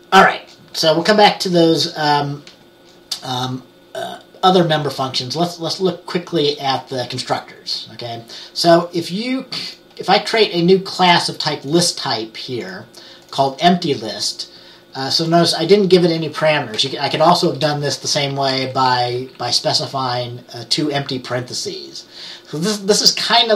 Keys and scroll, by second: 17.0-17.6 typing, 18.6 Left, 18.8 Left, 19.3 Right, 19.4 Right.